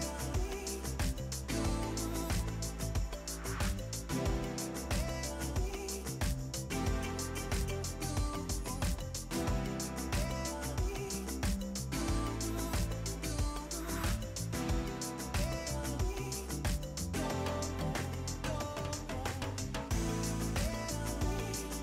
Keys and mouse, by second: 3.7 a, 4.0 Escape, 4.1 click, 8.5 click, 12.3 a, 12.4 click, 15.0 click, 15.5 c, 18.2 click, 20.8 shift+click, 21.2 KP_1, 21.5 Return.